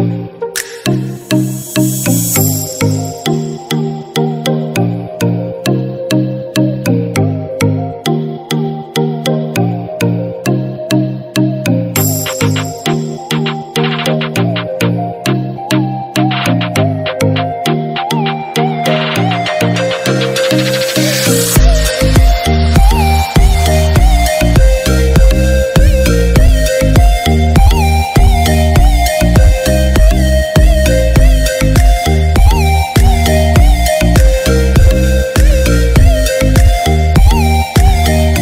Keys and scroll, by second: 11.6 ctrl+d, 12.6 ctrl+-, 14.5 ctrl+0.